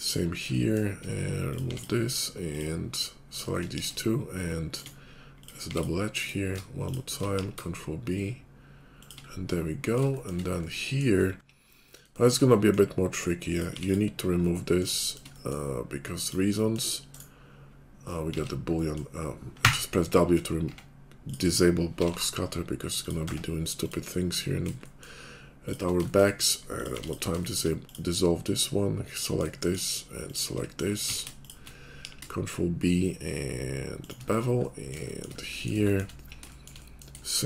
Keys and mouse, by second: 0.5 shift+click, 1.0 middle click, 1.5 click, 1.7 middle click, 1.7 x, 2.5 click, 3.0 shift+middle click, 3.2 shift+click, 3.4 shift+middle click, 3.7 ctrl+b, 3.7 ctrl+click, 3.9 shift+middle click, 4.2 shift+click, 4.9-6.2 middle drag, 5.7 x, 6.2 click, 6.3 middle click, 6.5 shift+click, 7.1 middle click, 7.3 ctrl+b, 7.3 ctrl+click, 7.5 middle click, 7.6-9.2 shift+drag, 9.2 middle click, 10.0 shift+click, 10.4 click, 11.3 middle click, 11.4-15.7 drag, 13.7 x, 18.3 ctrl+click, 18.4 ctrl+z, 19.6 w, 20.7 Tab, 21.9 g, 23.3 Tab, 24.3 middle click, 24.7-26.2 shift+drag, 26.2-27.3 middle drag, 26.9 x, 27.3 shift+click, 27.6-29.5 middle drag, 29.5-30.5 shift+drag, 30.5 middle click, 30.9 ctrl+click, 31.1 ctrl+z, 31.1 middle click, 31.2 shift+click, 31.6 middle click, 32.1 ctrl+b, 32.1 ctrl+click, 32.2-37.4 shift+middle drag.